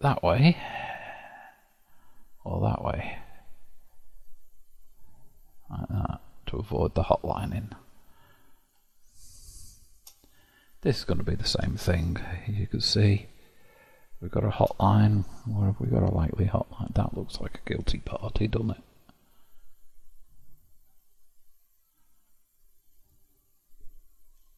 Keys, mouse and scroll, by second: 6.6-9.1 middle drag, 9.1-9.5 scroll down 6, 9.5-10.6 shift+middle drag, 10.6 click, 11.7 KP_7, 12.4-13.3 scroll up 4, 13.3-16.3 shift+middle drag, 18.1 g, 24.3 g.